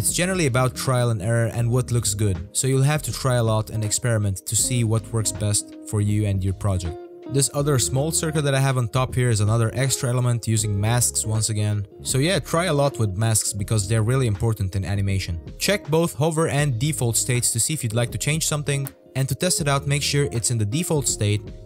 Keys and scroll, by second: 18.2 z.